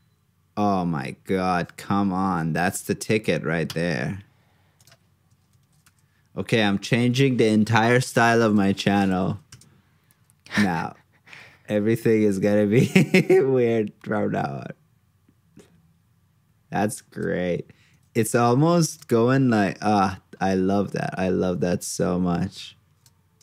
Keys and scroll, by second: 8.7 super+c, 9.2 super+v.